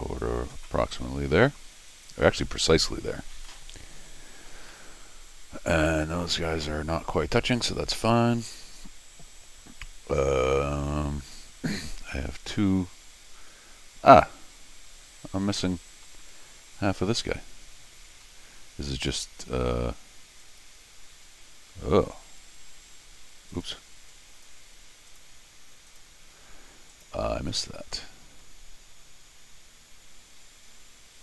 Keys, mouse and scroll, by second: 1.9 click, 3.5 middle click, 4.7-16.0 middle drag, 18.2-19.1 scroll down 4, 19.1 scroll down 1, 20.4 click, 22.2 click, 23.5 click, 24.1 click, 25.1 click, 25.9 click, 26.9 click, 27.6-28.5 scroll down 4.